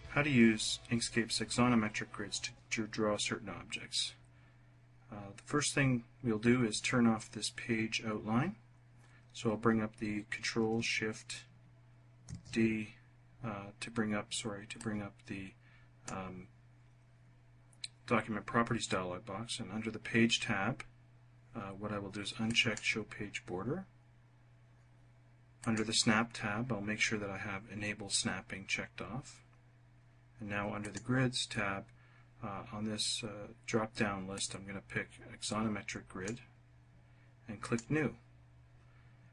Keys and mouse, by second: 12.2 ctrl+shift+d, 14.8 click, 15.8 click, 22.5 click, 25.7 click, 30.8 click, 34.4-36.3 drag, 37.6 click.